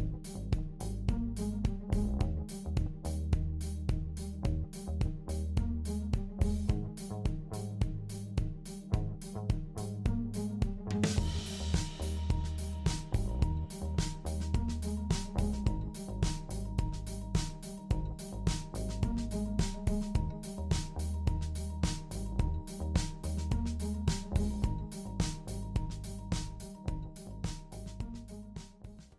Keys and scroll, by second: 5.3-7.2 typing.